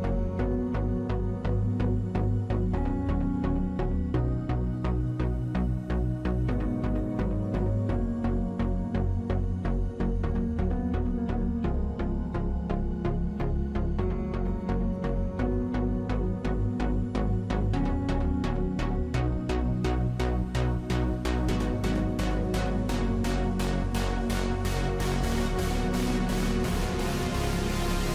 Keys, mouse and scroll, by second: 21.4-23.2 typing, 23.5 ctrl+c, 24.3 ctrl+v, 27.6 ctrl+click.